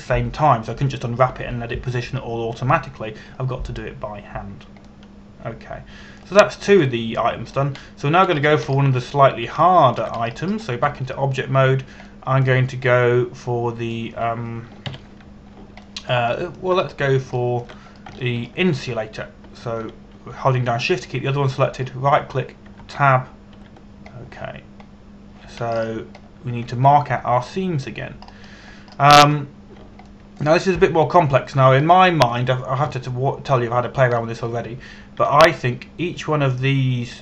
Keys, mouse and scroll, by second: 6.5 middle click, 10.0-11.1 scroll up 1, 11.3 shift+middle click, 11.9-12.5 scroll up 1, 12.5 Tab, 13.7 middle click, 16.6 ctrl+KP_1, 17.5 middle click, 18.0 shift+middle click, 18.5 scroll up 1, 19.1 shift+middle click, 19.8 shift+middle click, 23.4 shift+right click, 24.3 Tab, 25.2 a, 25.8-27.3 scroll down 1, 27.3-27.9 scroll up 1, 29.9 scroll up 1, 30.4-30.8 scroll down 1, 30.8 scroll up 1, 31.7 shift+middle click, 33.6 shift+middle click, 34.6 shift+middle click, 35.8 shift+middle click, 36.8 a.